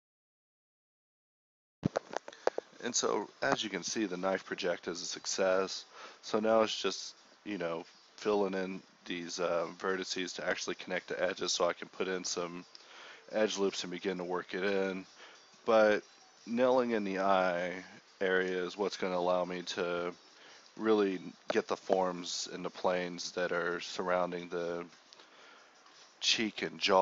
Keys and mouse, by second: 0.1 z, 0.4 z, 0.8 Tab, 1.0 z, 1.6 Tab, 2.4 z, 2.6 z, 3.9 alt+m, 4.8 z, 5.6 KP_1, 6.3 z, 6.6 shift+Tab, 7.4 g, 8.2 middle click, 8.3 z, 8.7 Tab, 9.1 Tab, 9.4 ctrl+b, 10.0 z, 10.2 ctrl+r, 10.8 g, 12.6 a, 12.9 k, 14.7 ctrl+b, 15.5 ctrl+shift+b, 16.6 ctrl+Tab, 17.2 ctrl+b, 17.8 ctrl+r, 19.0 z, 19.4 k, 20.6 ctrl+r, 21.6 click, 22.4 ctrl+b, 23.5 Tab, 24.3 KP_1, 24.5 Tab, 25.4 g.